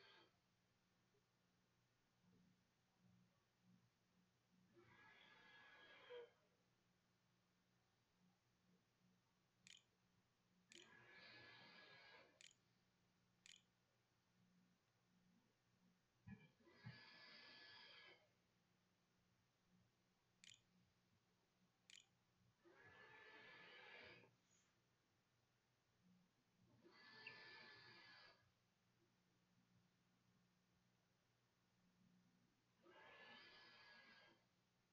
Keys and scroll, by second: 8.5-11.9 typing, 13.2 ctrl+s, 13.7 a, 16.2-17.8 typing, 18.9-19.8 typing, 20.8 ctrl+z, 21.3 ctrl+s, 22.2 a.